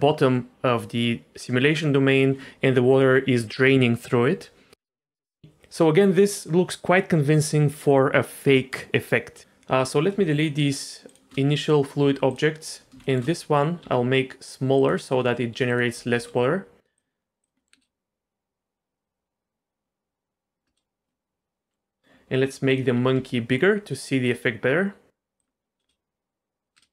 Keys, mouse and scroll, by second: 4.8-5.2 middle drag, 9.4 click, 11.1 shift+click, 12.0 x, 12.6 click, 13.0 shift+middle drag, 13.8 s, 15.2 s, 16.1 ctrl+a, 17.4 click, 17.6 middle drag, 17.7 space, 20.6 space, 21.1-21.5 middle drag, 21.5 click, 21.7 middle drag, 22.7 click, 23.1 s, 25.4 drag, 25.8 space, 26.7 space.